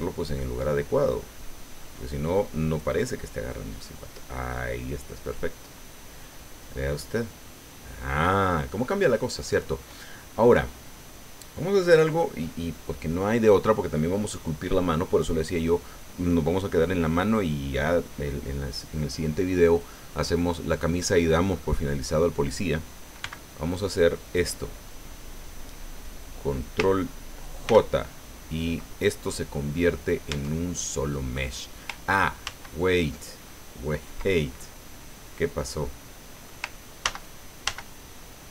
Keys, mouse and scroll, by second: 0.2-3.0 drag, 3.0-9.2 middle drag, 9.3-9.6 scroll down 1, 10.2 click, 20.2 scroll down 1, 20.8 middle click, 23.2 b, 23.7 click, 27.6 ctrl+j, 30.3 Tab, 32.4 ctrl+z, 35.7 click, 37.0 ctrl+z.